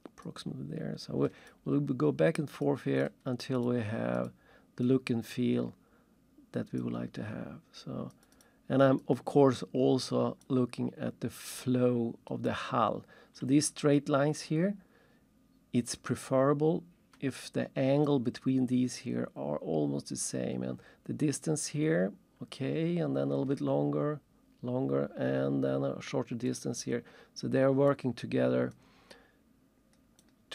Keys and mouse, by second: 1.5 click, 3.0 click, 4.1 click, 6.8 click, 8.3 click, 9.0 double click, 10.4 click, 12.5 click, 16.1 click, 18.0 click, 26.5 click, 27.9 click, 30.2 click.